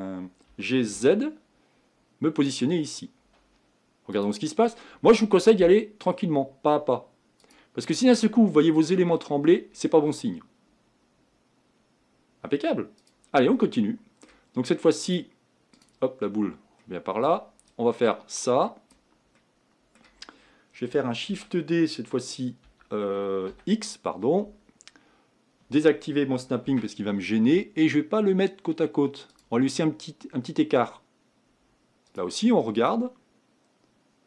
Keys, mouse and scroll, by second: 0.6 g, 2.8-3.4 scroll down 2, 3.7 scroll down 3, 4.2-5.5 drag, 5.5-7.5 middle drag, 7.5-10.5 drag, 13.0 click, 13.5-15.1 middle drag, 15.1-16.3 drag, 16.3-16.8 scroll down 1, 16.8-18.9 middle drag, 18.9 click, 19.4-21.3 middle drag, 21.3 shift+d, 32.2-34.2 drag.